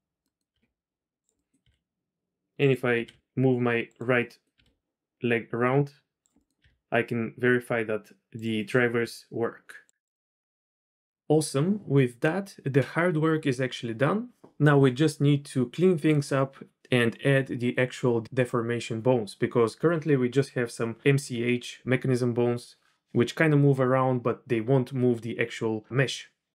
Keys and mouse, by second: 0.3 drag, 0.7 r, 1.3 click, 1.6 r, 3.0 r, 4.2-4.6 drag, 4.6 r, 6.6 r, 8.5 click, 8.9 r, 10.1 drag, 10.5 click.